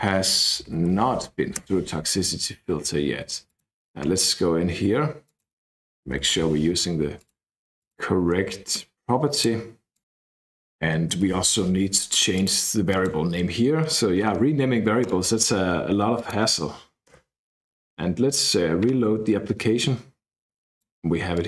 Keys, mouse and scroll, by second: 0.3-1.4 typing, 1.6 KP_Enter, 3.4 click, 5.2 click, 5.8-6.8 typing, 7.2 click, 7.8 click, 9.3 click, 9.9 click, 10.0-11.7 typing, 12.3 click, 12.9 click, 15.0 click, 16.1 click, 17.1 KP_Enter, 19.8-20.9 drag, 21.3 click.